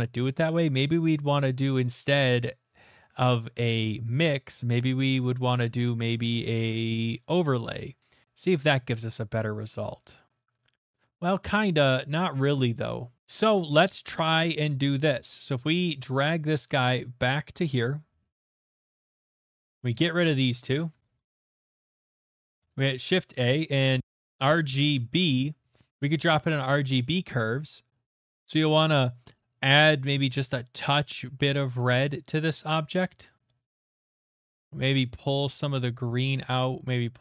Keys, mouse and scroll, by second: 7.3 click, 11.0 click, 13.2 click, 13.2 middle click, 14.3 middle click, 15.9 click, 17.9 click, 18.6 click, 18.9-22.1 middle click, 19.3 click, 20.0 click, 20.9 Delete, 21.5-22.0 scroll, 22.1 shift+middle click, 22.4 click, 23.1-25.6 typing, 23.5 click, 24.0 click, 25.9 Return, 26.9 Return, 26.9 click, 26.9 x, 26.9 a, 33.6 click, 36.0 click, 36.7 click.